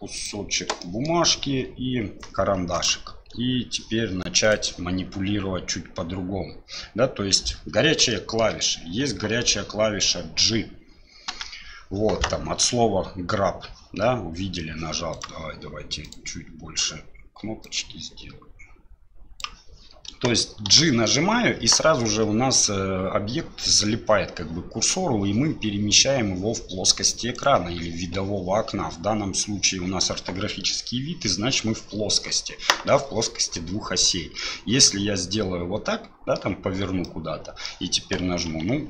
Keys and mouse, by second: 0.8 shift+middle drag, 1.4 shift+a, 8.1-8.4 shift+middle drag, 11.3 g, 16.1 click, 17.6-19.4 drag, 20.6 g, 34.1-36.3 middle drag, 37.0-37.7 middle drag, 38.5 g.